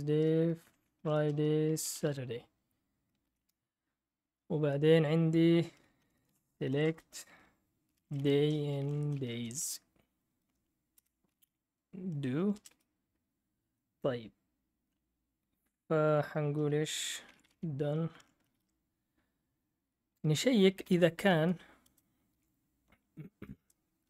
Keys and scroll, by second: 0.0-3.7 typing, 5.7-13.2 typing, 11.0 Return, 14.4-15.1 typing, 16.4-18.5 typing, 18.1 Escape, 20.6-22.3 typing, 23.5-24.0 typing.